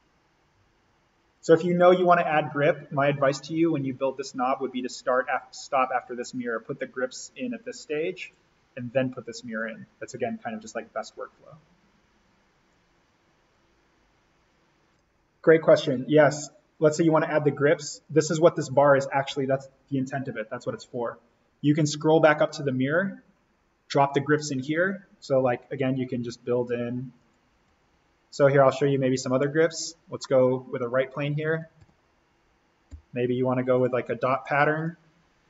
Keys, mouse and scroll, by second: 1.7 scroll down 1, 4.0-7.3 drag, 9.1-12.1 drag, 12.7-14.9 drag, 17.9-25.5 drag, 25.5 scroll up 1, 27.1 click, 30.1 scroll up 1, 30.4 middle click, 31.3 alt+s, 31.7 alt+n, 32.9 o, 33.7 click.